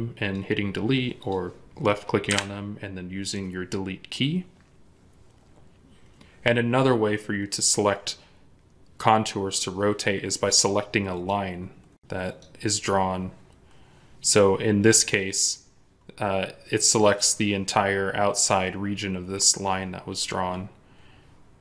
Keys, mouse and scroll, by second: 2.2 Delete.